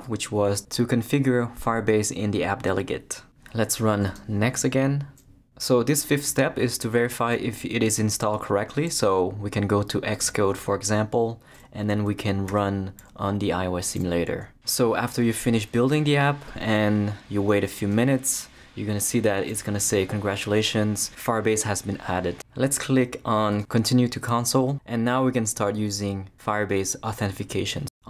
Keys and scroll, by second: 12.5 super+r.